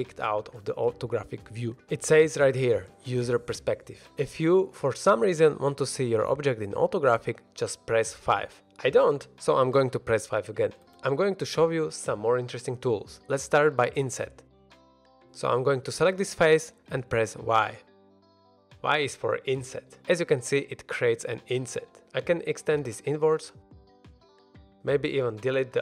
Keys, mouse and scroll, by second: 8.1 KP_5, 8.4 middle click, 10.1 KP_5, 14.4 3, 15.3 click, 16.1-16.8 scroll up 1, 18.2 i, 21.3 shift+click, 21.3 shift+middle click, 21.3-21.6 scroll up 1, 21.6 e, 23.7 click, 24.0 middle drag, 24.7 x, 25.2 click, 25.6 ctrl+z.